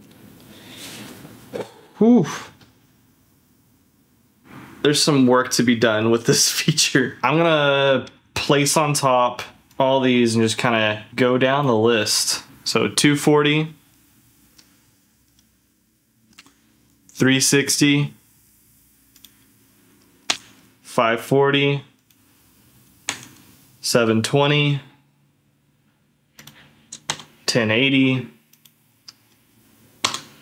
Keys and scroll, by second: 12.5 d, 16.4 d, 20.3 d, 23.1 d, 27.1 d, 30.0 d.